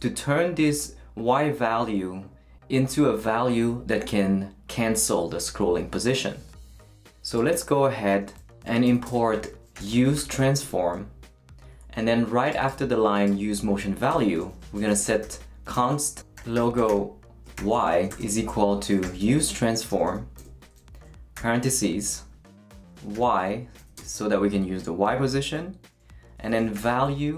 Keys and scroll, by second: 9.5-10.8 typing, 14.1 Return, 14.5-21.3 typing, 21.0 shift+Return, 22.1 shift+super+9, 23.1 y, 23.8 ,, 26.1-27.3 typing.